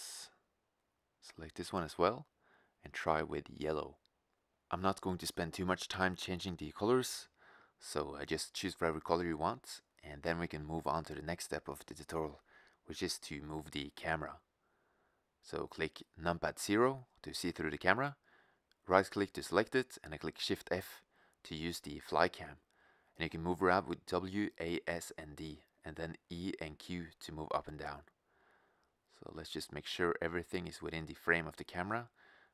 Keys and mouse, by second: 0.7-2.3 drag, 6.2 click, 6.4 click, 6.5 middle drag, 6.9 middle click, 7.4 middle click, 12.0 right click, 12.5-13.0 middle drag, 13.0-14.3 drag, 15.4-16.6 middle drag, 16.9 KP_0, 18.0 shift+z, 19.0 right click, 19.9 shift+f, 27.7-29.5 drag.